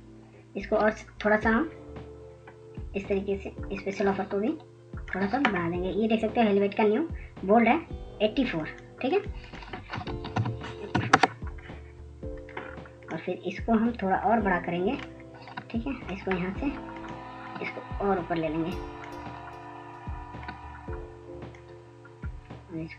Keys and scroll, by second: 13.2 ctrl+a, 13.5-14.1 typing, 14.3 Return, 17.1 typing, 18.1 typing.